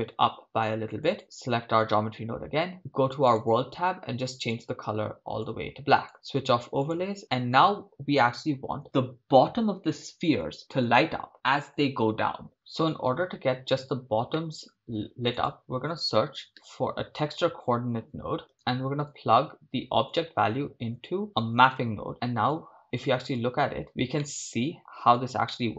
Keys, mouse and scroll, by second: 1.2 ctrl+click, 1.2 right click, 6.9-12.5 drag, 12.6 shift+middle click, 14.7 shift+middle click, 22.5 drag, 22.9 click, 23.6 ctrl+shift+click, 24.3 middle click, 25.6 middle click.